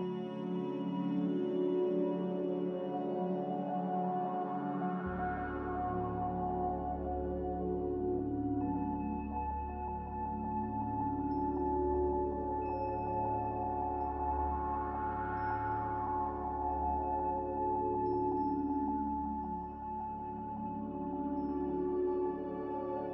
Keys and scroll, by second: 2.0 Escape, 2.1 Escape, 5.3-6.6 typing, 8.1-9.8 typing, 12.4-13.1 typing, 17.5 n, 20.0 m, 21.5 Escape, 21.7 Escape, 21.9 Escape.